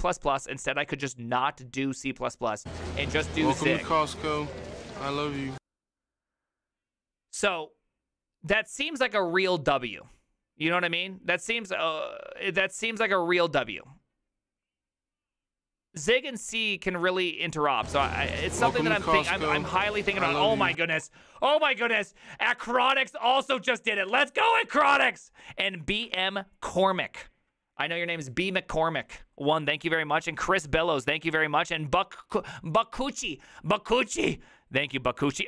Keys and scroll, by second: 21.0 alt+f.